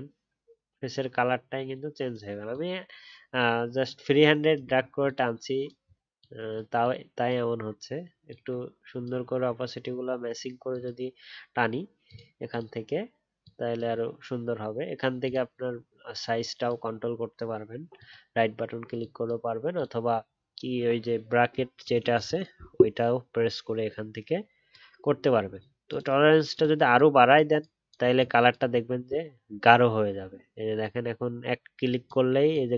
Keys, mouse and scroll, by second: 4.7-5.8 alt+scroll up 2.